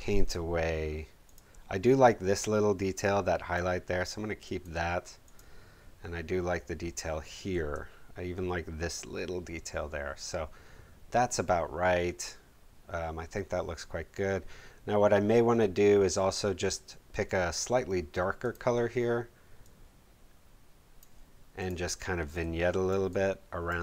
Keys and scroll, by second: 7.5 super+z.